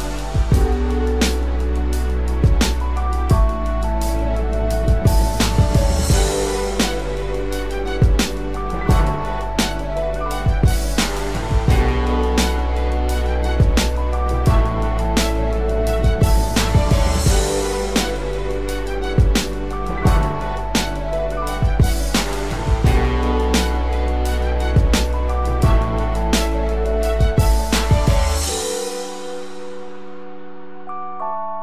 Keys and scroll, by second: 3.5 ctrl+-, 3.9 ctrl+=, 4.9 ctrl+=.